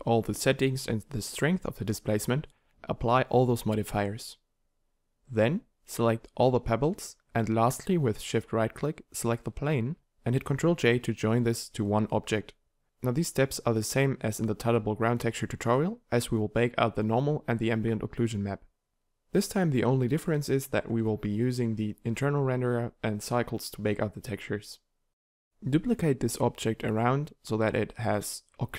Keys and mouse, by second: 4.0 KP_7, 7.6 b, 12.6 ctrl+j, 12.8-13.8 drag, 15.1 shift+Tab, 16.2 shift+d, 19.5 shift+d, 20.7-21.9 drag, 21.9 a, 22.5 right click, 23.1 shift+d, 24.0-25.1 drag, 27.5 click, 27.5 shift+d.